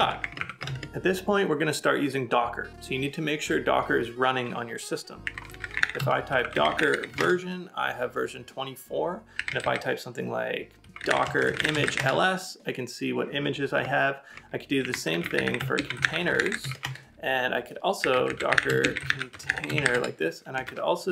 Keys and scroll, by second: 5.3 typing.